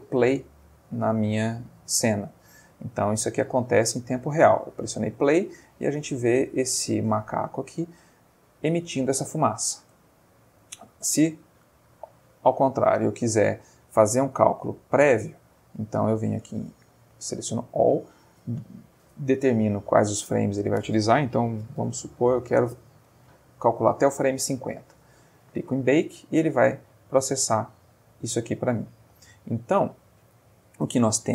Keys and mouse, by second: 0.3 space, 9.8 space, 11.1-12.3 drag, 15.5 click, 16.4 click, 17.2 middle click, 20.4 click, 21.7 5, 21.8 0, 22.3 BackSpace, 22.6 Return, 24.9 click.